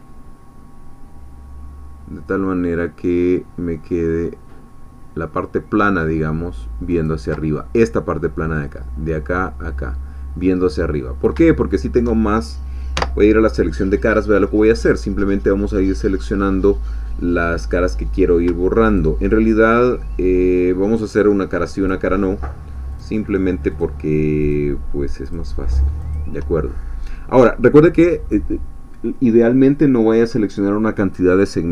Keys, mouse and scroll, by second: 6.9 ctrl+click, 10.9-11.2 scroll up 2, 11.5-12.5 shift+middle drag, 13.0 3, 14.9 click, 19.0 shift+click, 19.3 shift+middle click, 21.9-23.2 shift+drag, 23.8 shift+click, 25.3 shift+click, 26.8-29.9 shift+scroll down 2, 29.9-31.7 scroll down 1.